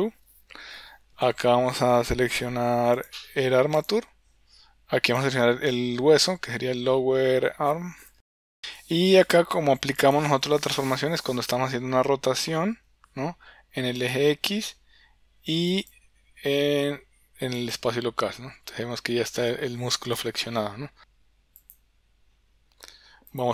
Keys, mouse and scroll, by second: 21.6 click, 23.4-23.5 drag.